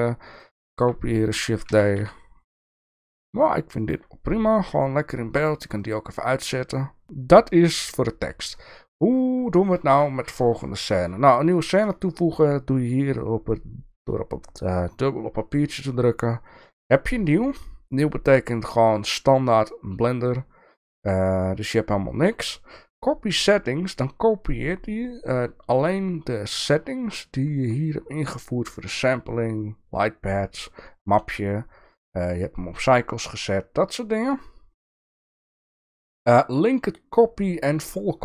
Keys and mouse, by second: 0.8 shift+middle click, 1.7 g, 5.8 click, 15.6-27.0 drag, 27.6 click, 35.4-38.0 drag.